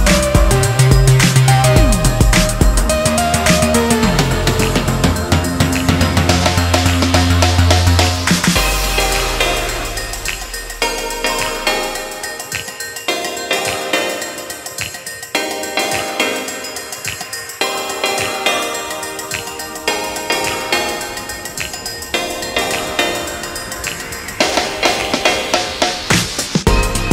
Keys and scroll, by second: 0.8-2.6 typing, 15.0 [, 15.2 [.